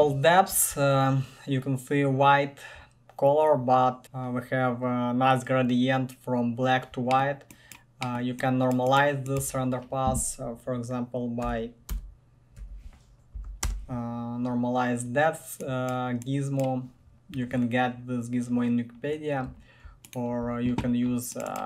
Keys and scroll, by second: 9.6 ctrl+shift+Tab, 11.6-12.8 typing, 13.6 Down, 13.8 Return.